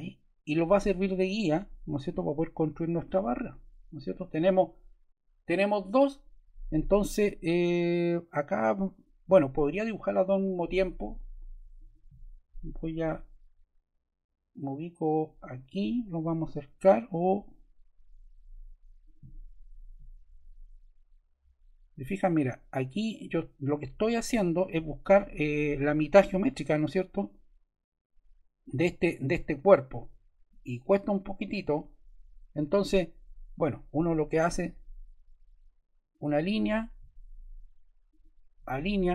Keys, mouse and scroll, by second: 0.3 click.